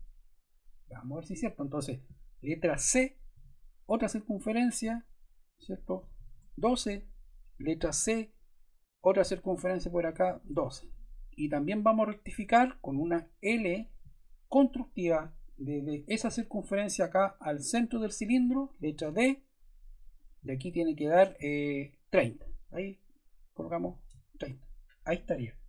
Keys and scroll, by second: 3.2 c, 5.7-6.6 typing, 7.9 c, 9.7-10.7 typing, 12.3 Escape, 13.4 l, 18.4 Escape, 18.9 d, 23.3-24.2 typing, 24.3 Return.